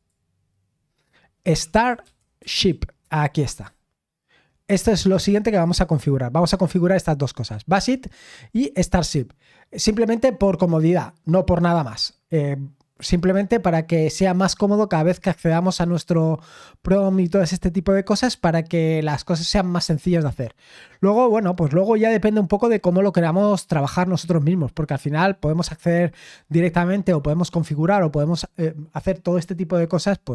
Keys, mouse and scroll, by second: 1.4-3.4 typing, 3.0 Return.